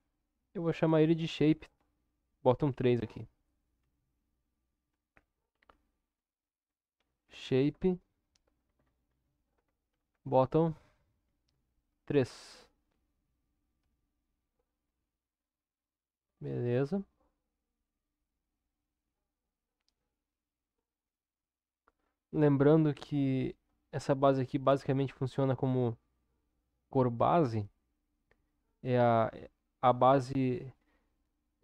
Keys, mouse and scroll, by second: 10.0 t.